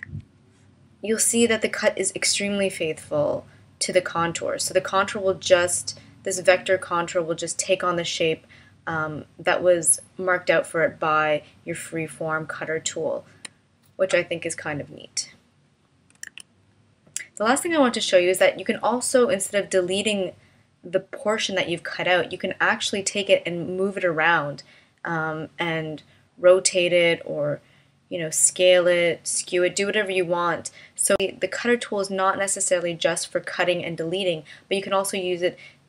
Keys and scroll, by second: 0.0 a, 16.3 super+z.